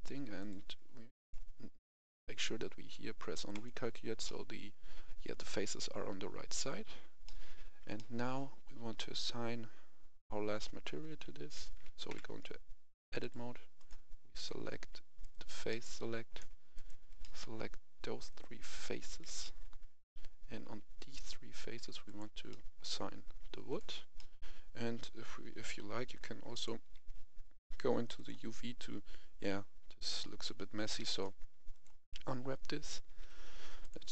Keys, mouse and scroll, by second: 0.3 click, 4.2-7.2 middle drag, 7.6 Tab, 7.9 middle click, 12.0 Tab, 13.2 right click, 13.7 click, 15.2 right click, 15.6 middle click, 16.7 shift+right click, 17.1 middle click, 18.2 shift+right click, 19.4-20.9 middle drag, 22.0 click, 22.4 middle click, 23.6 click, 24.1 middle click, 26.5 click, 33.2 u, 33.8 click.